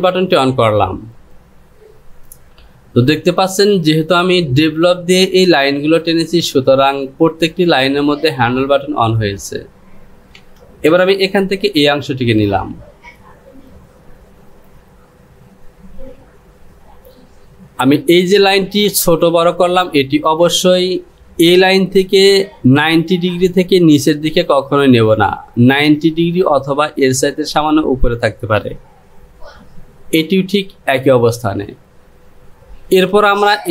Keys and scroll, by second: 10.5 Return.